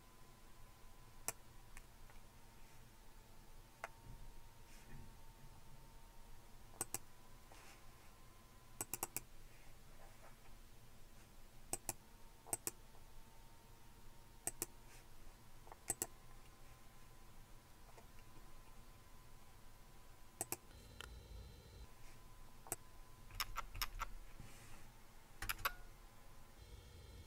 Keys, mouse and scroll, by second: 6.8 click, 8.8 click, 9.2 super+w, 11.7 click, 12.6 click, 14.5 click, 15.9 click, 18.4-20.1 scroll down 1, 20.4 click, 21.0 click, 23.6 Up, 23.8 Up, 25.4 Return.